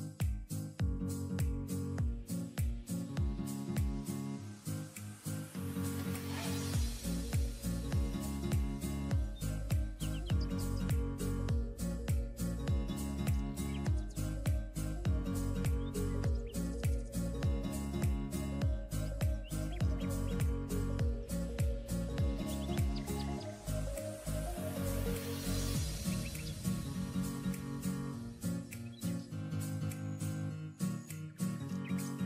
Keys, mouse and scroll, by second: 1.9-3.1 scroll down 1, 11.9 ctrl+z, 13.9 ctrl+click, 14.7 ctrl+e, 15.4 ctrl+j.